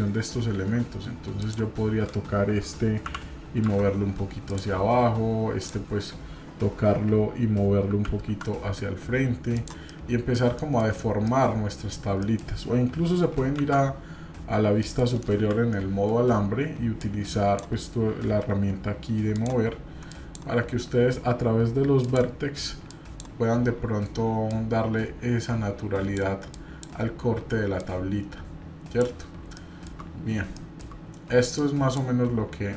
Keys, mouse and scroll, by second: 1.4 click, 3.0 g, 5.6 click, 9.8 scroll down 1, 9.9 middle click, 10.6 shift+middle click, 11.0 scroll up 1, 11.1 middle click, 11.2 scroll down 1, 11.2 middle click, 12.2 middle click, 13.6 shift+z, 14.8 middle click, 15.3 KP_7, 17.0 click, 19.3 click, 20.1 click, 22.0 click, 22.9 click, 23.5-24.0 scroll up 1, 24.5-26.2 drag, 24.5 scroll up 1, 26.5 click, 27.8-29.0 drag, 29.5 shift+middle click, 29.5-30.5 shift+scroll down 4, 30.5 shift+middle click, 31.5 click.